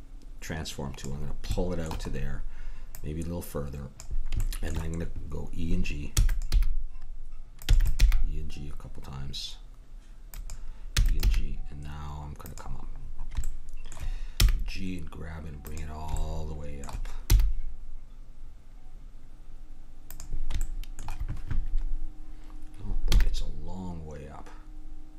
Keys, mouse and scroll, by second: 1.5-2.9 middle drag, 2.9-5.7 drag, 6.1 e, 6.5 g, 7.7 e, 8.0 g, 11.2 g, 12.9-14.5 middle drag, 14.4 g, 17.3 g, 18.3-20.8 middle drag, 23.1 g.